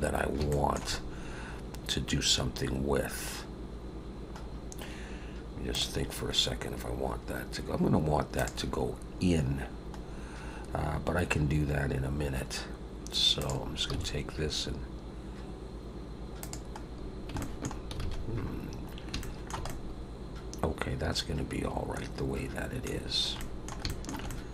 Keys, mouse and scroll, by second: 0.5 shift+middle click, 1.0-2.2 scroll up 1, 2.3-2.8 scroll up 2, 3.0-3.5 scroll down 1, 4.4-5.4 scroll down 1, 10.1-10.9 scroll up 1, 13.4 click, 13.9 g, 16.8 scroll down 2, 17.4 shift+middle click, 18.0 alt+a, 18.2-19.1 scroll down 5, 19.2 shift+middle click, 19.6 middle click, 23.0-23.4 scroll down 3, 23.4 middle click, 23.9 shift+middle click, 24.3 middle click.